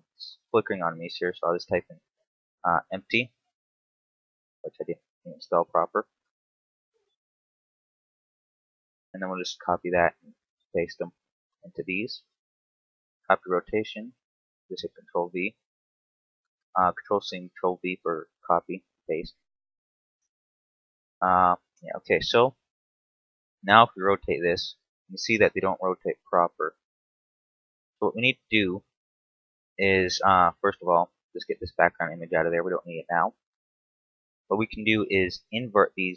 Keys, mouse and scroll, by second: 5.2 click, 8.8 ctrl+c, 9.6 right click, 11.6 click, 14.3 ctrl+v, 15.5 right click, 16.5 click, 19.3 ctrl+v, 21.2 right click, 23.3 right click, 24.0 r, 27.4 right click, 28.4 KP_7, 29.2 scroll down 2, 29.6 shift+middle click, 30.6 n, 31.9 click, 32.3 n, 32.8-33.2 scroll down 2, 33.2 shift+middle click, 33.5-33.9 scroll up 1, 34.0 right click.